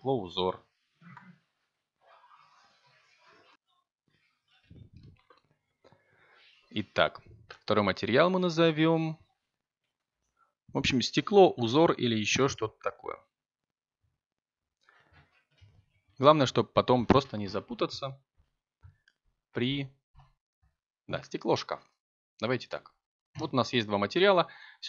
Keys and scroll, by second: 16.3 i, 17.1 r, 17.2 f, 17.7 a, 17.9 Return.